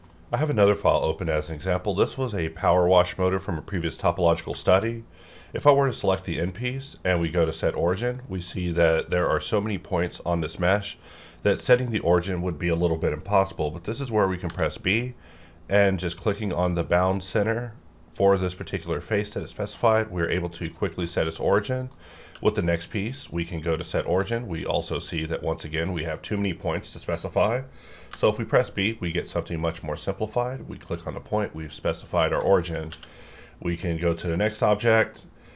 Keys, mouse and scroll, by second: 4.1 middle click, 4.6 shift+middle click, 4.9-5.3 scroll up 1, 5.3 click, 6.0 q, 7.4 click, 7.4 click, 8.0-14.4 middle drag, 14.5 b, 16.0 click, 20.4 middle click, 21.1 shift+middle click, 21.5 click, 21.9 middle click, 22.2 q, 23.3 click, 23.3 click, 28.1 b, 30.2 click, 32.5 shift+middle click, 32.9 q, 34.2 click, 34.7-35.5 middle drag.